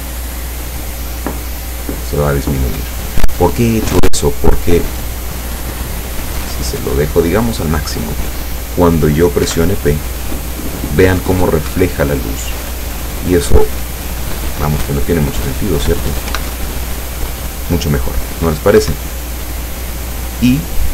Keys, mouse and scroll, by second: 5.4-7.5 drag, 9.5 p, 11.8 Escape, 13.7-14.9 drag, 16.3 p, 18.9 Escape, 20.8 scroll up 2.